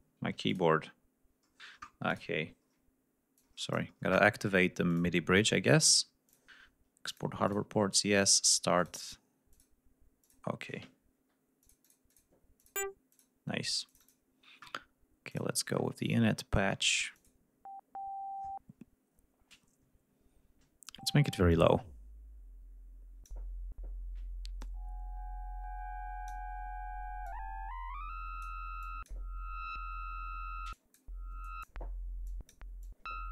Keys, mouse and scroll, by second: 0.4 click, 2.0 click, 3.3 click, 4.8 click, 6.2 click, 7.0 click, 7.4 click, 7.8 click, 8.7 click, 9.4 click, 10.1 click, 11.5 click, 12.5 click, 13.0 click, 13.8 click, 15.2 click, 15.6-16.3 scroll down 1, 16.5-17.0 scroll down 1, 17.0 click, 21.4-23.4 drag, 24.5-26.4 drag, 27.2-28.5 drag, 28.7 click, 30.6 click, 31.3 click, 32.2 click, 32.7 click.